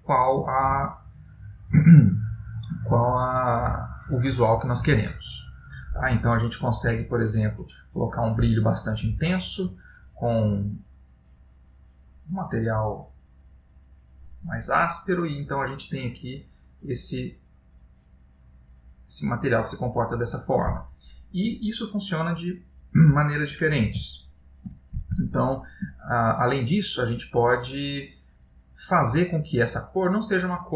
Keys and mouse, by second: 6.5 click, 10.4 click, 15.1 middle click, 24.3 ctrl+middle click, 29.1 click, 30.3 click.